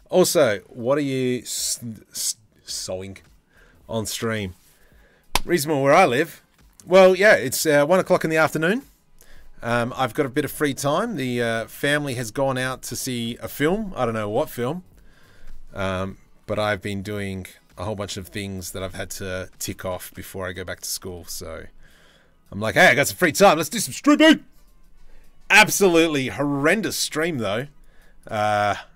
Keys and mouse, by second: 10.7 Tab, 12.2 3, 19.2 shift+middle click.